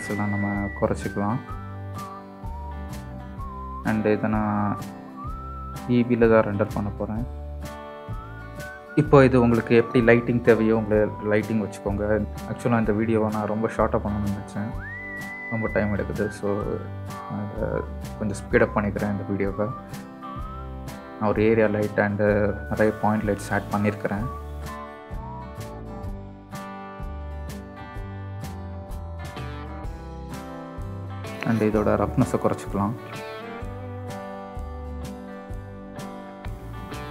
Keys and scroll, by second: 0.7 KP_0, 2.5 Tab, 25.4-31.1 typing, 29.4 ctrl+z.